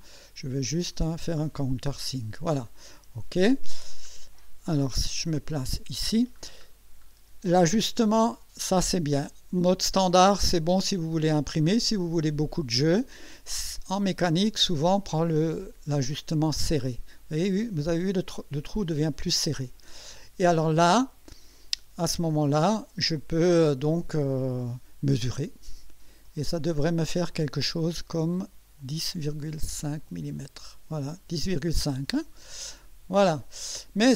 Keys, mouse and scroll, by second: 1.4 click, 3.8-4.1 scroll up 2, 5.2 click, 5.6 KP_1, 6.4 scroll up 2, 6.7 scroll down 1, 14.0 click, 16.6 click, 26.2 click, 28.8 click, 30.3 click, 33.2 click.